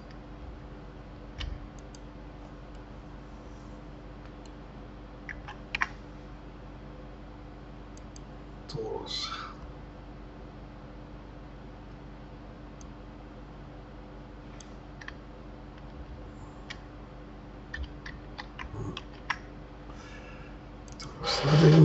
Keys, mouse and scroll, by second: 0.4 ctrl+z, 1.7 click, 2.7-5.5 middle drag, 5.5 shift+a, 12.8-15.8 drag, 16.0 ctrl+z, 19.0 shift+a.